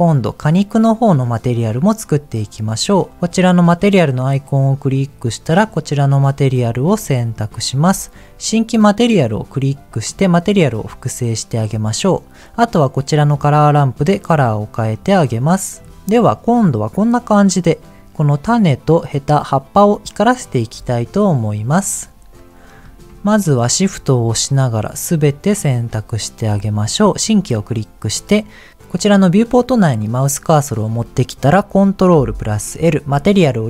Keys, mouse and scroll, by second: 3.2-5.7 drag, 6.7-7.0 scroll down 2, 7.0 middle click, 9.6 click, 11.2 middle click, 13.2 click, 22.1-22.7 scroll up 1, 22.7 click, 23.3 shift+click, 24.1 shift+click, 25.0 shift+click, 25.4 shift+click, 27.1 click, 32.0 ctrl+l.